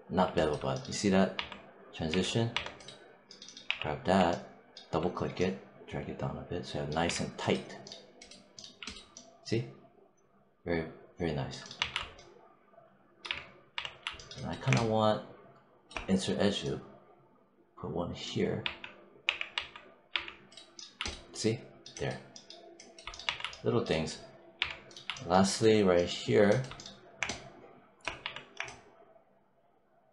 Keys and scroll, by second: 1.2 1, 3.5 w, 6.9 3, 11.6 1, 13.1 3, 18.5 3, 19.1 w, 19.4 1, 23.1 1, 24.4 3, 28.1 1.